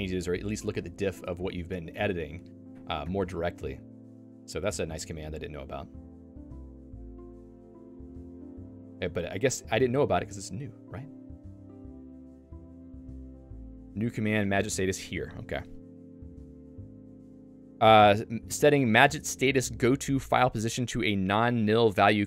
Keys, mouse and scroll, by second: 8.5 click, 9.7 click, 10.8 click, 13.2 Return.